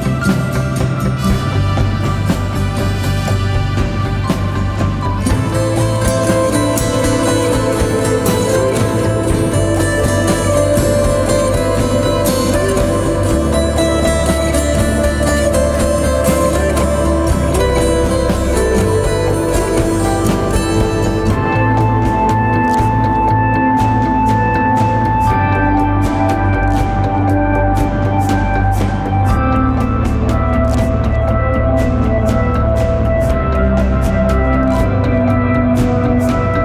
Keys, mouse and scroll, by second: 12.0 ctrl+t, 14.3 alt+shift+click, 24.0 Return, 35.1 ctrl+t, 35.9 alt+shift+click.